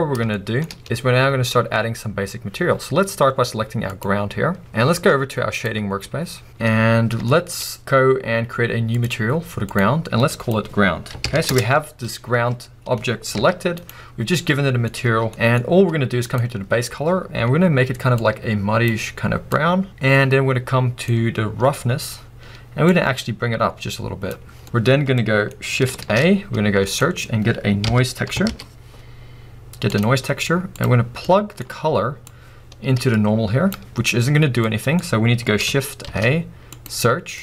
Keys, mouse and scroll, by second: 4.0 click, 5.8 click, 6.4-7.3 scroll down 3, 6.5 KP_0, 7.3-7.6 shift+middle drag, 7.6-8.4 scroll up 2, 8.4-9.2 scroll up 1, 9.2 click, 11.6 Return, 13.0-13.4 scroll down 2, 13.4 g, 13.4 click, 13.9 right click, 18.0 right click, 18.2-19.4 drag, 19.7 click, 23.0-37.4 drag.